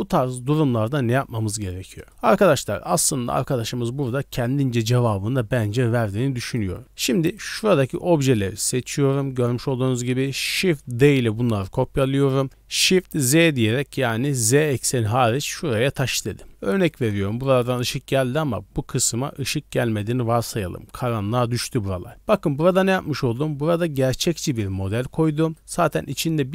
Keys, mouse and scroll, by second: 1.9-2.3 scroll up 3, 2.0 middle click, 4.9 scroll up 1, 6.4 right click, 6.4 scroll up 2, 7.3 shift+click, 7.3 shift+right click, 7.8 shift+right click, 8.8 shift+right click, 9.2-10.2 scroll down 3, 10.0 shift+middle drag, 10.6 middle click, 11.1 shift+d, 16.3-16.6 scroll down 1, 16.6 middle click, 22.1 click, 25.5 right click.